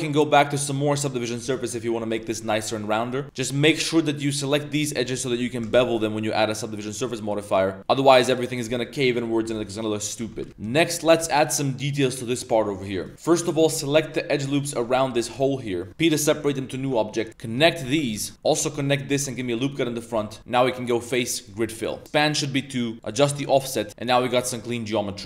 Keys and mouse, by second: 0.2-0.6 drag, 0.7 middle drag, 2.2 middle click, 2.8 middle click, 3.2 Tab, 3.2 2, 3.6 alt+shift+click, 4.3 click, 5.0 z, 5.2 z, 5.6 ctrl+b, 7.8 Tab, 8.1 middle click, 8.7 shift+middle drag, 9.6 middle click, 10.2 Tab, 10.6 middle drag, 11.2 middle drag, 12.7 middle click, 13.0 click, 13.3 alt+click, 13.9 alt+shift+click, 14.9 alt+shift+click, 15.3 z, 15.6 middle click, 15.9 z, 16.2 p, 16.8 Tab, 17.1 click, 17.3 Tab, 17.3-18.7 typing, 18.3 ctrl+r, 18.3 ctrl+z, 18.4 shift+click, 19.0 ctrl+r, 19.3 click, 20.1 a, 20.8-21.4 drag, 23.0 click, 23.7 middle click, 24.0-24.3 middle drag, 24.6-25.0 middle drag, 25.2 2.